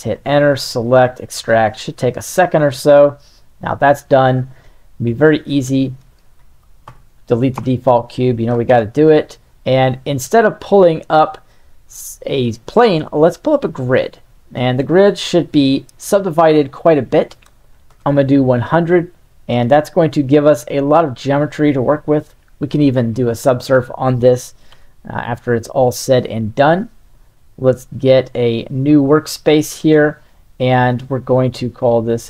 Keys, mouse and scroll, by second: 6.1 click, 6.8 a, 7.5 Delete, 8.7 shift+a, 15.6-17.9 drag, 17.6 KP_0, 20.0 z, 22.4 click, 23.3 Tab, 24.7 z, 25.3 Tab, 27.5 click, 28.7-30.1 right drag, 31.5-32.2 drag.